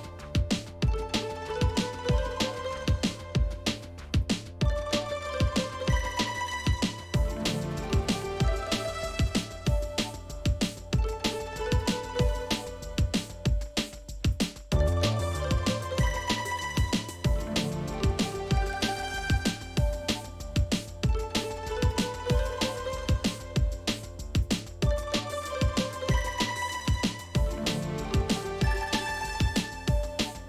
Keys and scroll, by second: 5.5 Down, 7.5 Down, 7.7 Down, 7.8 Down, 7.8 Down, 8.1 Down, 8.2 Down, 8.6 shift+Right, 10.1-10.5 Down, 10.8 shift+Right, 11.5-12.7 Left, 12.7 Right, 13.1 Right, 14.0 shift+Up, 14.1 shift+Up, 14.2 shift+Up, 15.4 shift+Right, 15.6 Left, 16.6 shift+Up, 17.1 Left, 17.5 Left, 17.9 shift+Down, 18.1 shift+Down, 18.1 shift+Down.